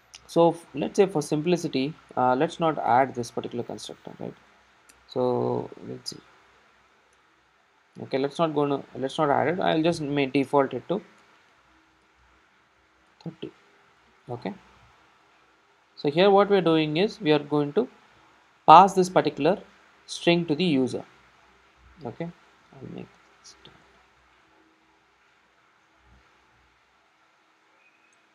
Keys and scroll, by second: 8.7 super+s, 15.1 super+s, 15.2 super+s, 26.1 Return.